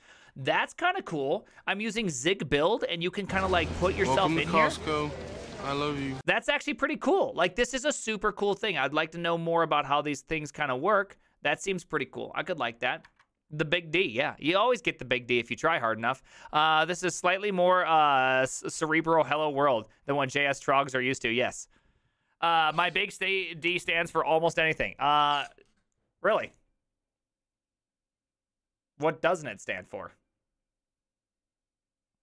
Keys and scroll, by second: 13.1 alt++.